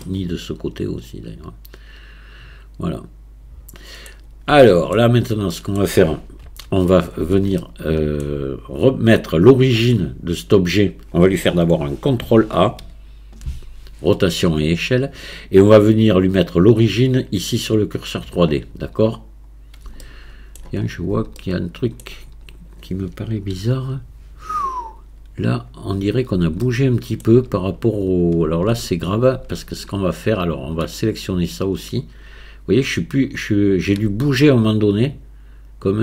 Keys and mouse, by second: 0.0-4.0 middle drag, 4.6 shift+middle click, 5.5 click, 5.5 right click, 6.4 KP_1, 7.6 shift+click, 12.8 ctrl+a, 20.0-20.6 shift+middle drag, 21.4-22.0 shift+middle drag, 22.0 middle click, 23.6 KP_1, 26.8 shift+click, 33.6 shift+click, 35.2-36.0 drag.